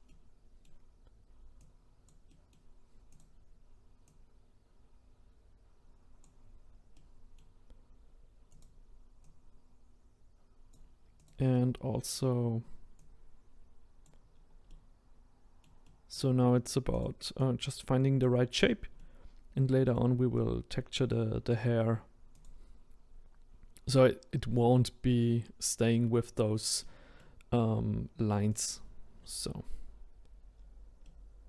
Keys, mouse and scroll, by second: 0.1-1.6 middle drag, 1.6 click, 2.3 middle click, 3.2 click, 4.2 click, 7.0-8.6 middle drag, 8.6 click, 9.3 click, 11.5-13.0 middle drag, 13.0 click, 14.3-14.7 scroll down 2, 14.7-17.0 middle drag, 17.0 click, 17.4 click, 18.6-19.0 scroll down 1, 19.0-21.1 middle drag, 21.1-22.5 scroll down 2, 22.5 click, 22.7-25.8 scroll up 2, 25.8 middle click, 26.4-26.8 scroll down 1, 26.8-28.6 middle drag, 28.6 click, 29.5-30.6 scroll up 1, 30.6-31.0 scroll down 1, 31.0-31.4 middle drag.